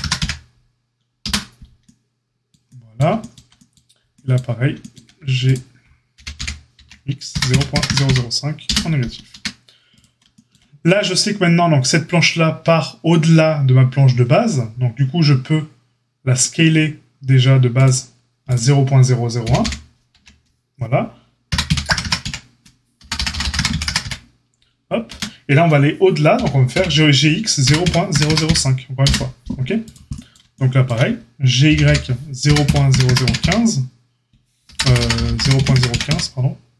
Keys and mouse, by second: 6.1 g, 9.3 Tab, 10.9 Tab, 17.8 click, 18.5-36.7 middle drag, 19.4 g, 26.3 g, 31.6 g.